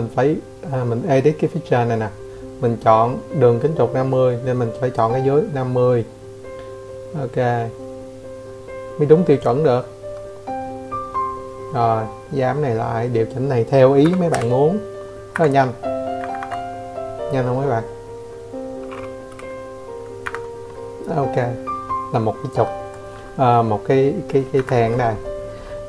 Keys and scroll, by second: 6.1-6.4 typing, 7.4 Escape, 8.3 Escape, 8.4 Escape, 11.4 0, 12.3 Escape, 16.7 Escape, 18.2 Escape, 18.6 Escape, 21.5 Escape, 21.7 Escape.